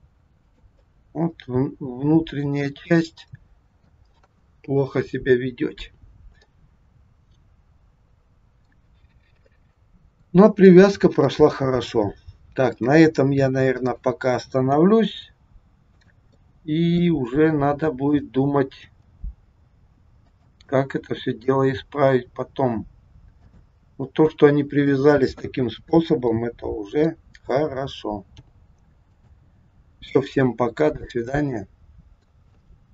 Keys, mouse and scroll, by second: 0.8 middle click, 5.4-6.0 scroll down 2, 6.0-6.5 scroll down 2, 6.5 middle click, 8.9 scroll down 1, 9.4 middle click, 10.6 middle click, 12.6 click, 13.7 click, 14.7 g, 16.4 middle click, 18.1 click, 18.7 g, 20.6 middle click, 21.7 g, 23.8-24.2 scroll up 3, 24.9 middle click, 26.2 middle click, 28.4 g, 29.9-30.6 scroll down 2, 30.6-31.1 scroll down 2, 31.1 middle click.